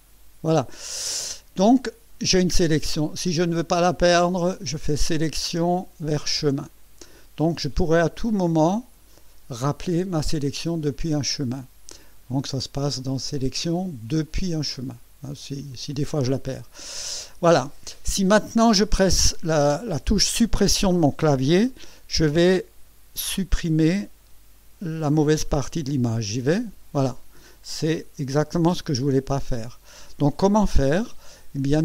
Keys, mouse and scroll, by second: 4.8 click, 6.8 click, 9.1 click, 12.0 click, 13.3 click, 15.7 click, 26.3 Delete, 29.4 ctrl+z.